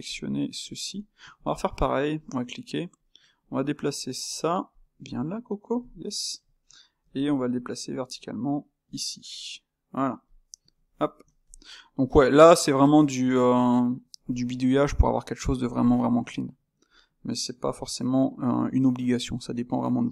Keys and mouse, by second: 0.0 click, 0.9 click, 2.2 shift+q, 2.9 click, 3.4 click, 4.2 click, 4.6 click, 5.0 click, 5.9-7.1 middle drag, 7.1 g, 10.2 click, 11.5 shift+q, 12.0-18.6 ctrl+middle drag, 18.6 h, 19.3-20.1 middle drag.